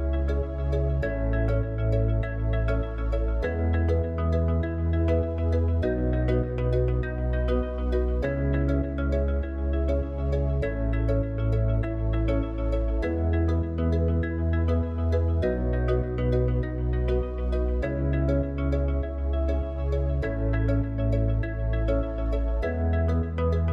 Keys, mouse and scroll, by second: 5.9-8.6 middle drag, 11.7-14.7 middle drag, 15.1-18.2 middle drag, 23.6 click.